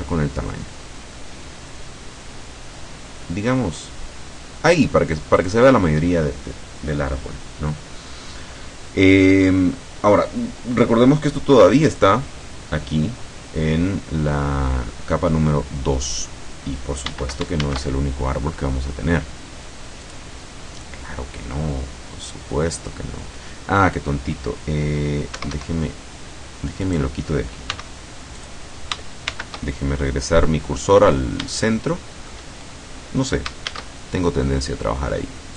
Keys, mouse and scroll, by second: 0.0 s, 5.4 click, 12.0 click, 17.7 shift+a, 20.1 click, 22.7-23.1 scroll down 2, 23.4 scroll up 2, 25.4 Escape, 26.9 right click, 27.8 x, 28.4 click, 29.3 shift+c, 31.2 scroll down 2, 31.7 shift+middle click, 32.6 shift+scroll up 2, 33.7 shift+a.